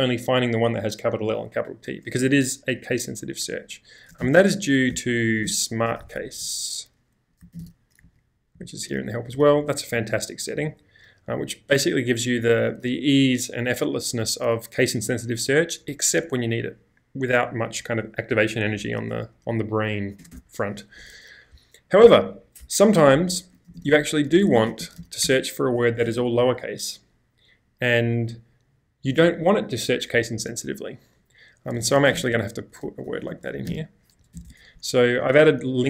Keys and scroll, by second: 4.2-8.1 typing, 8.6 Return, 9.8 typing, 20.2 typing, 23.0-26.0 typing, 27.2 typing, 31.6-34.3 typing.